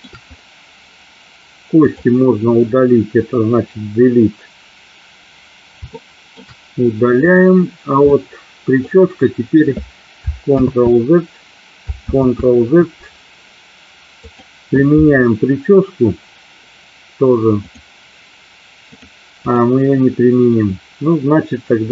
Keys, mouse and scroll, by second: 1.9 click, 3.7 Delete, 6.1 shift+middle click, 7.4 click, 8.2 middle click, 10.7 ctrl+z, 12.4 ctrl+z, 17.7 click, 19.0 click.